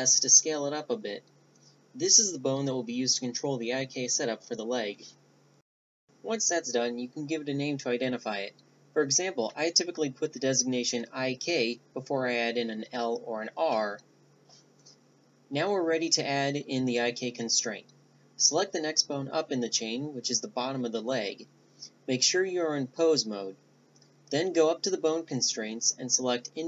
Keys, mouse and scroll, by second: 4.5-8.7 drag, 20.2 a, 20.4 Tab, 23.9-25.4 right drag, 24.7-25.9 drag, 25.9-26.6 right drag.